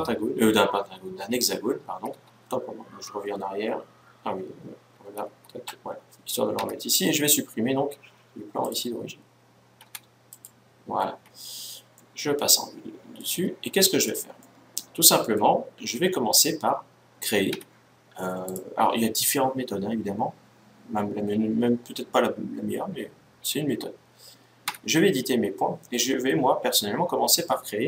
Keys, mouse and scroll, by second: 1.8 ctrl+z, 2.8 ctrl+z, 4.9 ctrl+z, 6.3 Tab, 8.4-10.0 drag, 9.5 x, 11.6-13.4 middle drag, 13.4 scroll down 1, 13.6-15.7 middle drag, 15.9 middle click, 17.3 Tab, 18.2-20.0 right drag, 24.4 Tab.